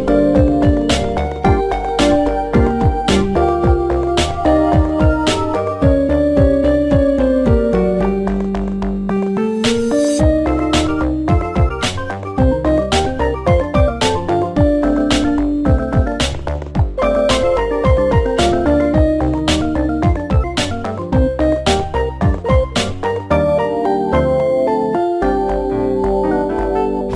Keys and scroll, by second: 12.2 g, 18.3-19.2 typing.